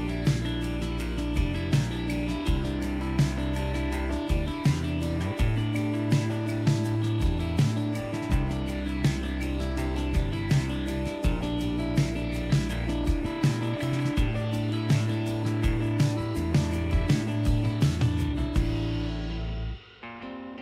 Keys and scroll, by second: 0.2 ctrl+-, 2.1 ctrl+=, 2.2 ctrl+=, 6.4 ctrl+-, 6.7 ctrl+-, 7.6 ctrl+=, 13.7 ctrl+=, 13.8 ctrl+=, 16.1 ctrl+-, 16.4 ctrl+-, 17.9 ctrl+=, 17.9 ctrl+=, 18.5 ctrl+=.